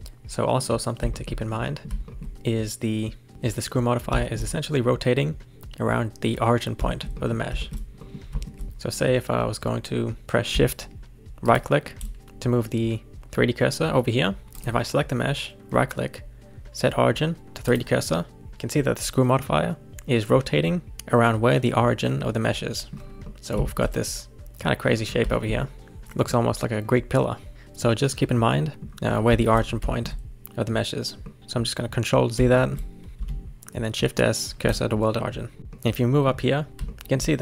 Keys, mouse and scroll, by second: 0.0 click, 1.1 shift+middle click, 1.4-1.7 scroll up 3, 1.7-10.2 middle drag, 11.4 shift+right click, 14.5 click, 15.6-20.1 right drag, 20.1-21.3 scroll up 1, 22.5 middle click, 22.9-23.2 scroll down 3, 23.2-25.0 middle drag, 25.0-25.3 scroll up 1, 25.3 shift+middle click, 26.3-29.1 middle drag, 29.1-29.6 scroll up 3, 29.6-29.9 scroll down 1, 29.9-31.4 shift+middle drag, 31.4 ctrl+z, 32.5 shift+middle click, 33.3 shift+s, 35.2 middle click.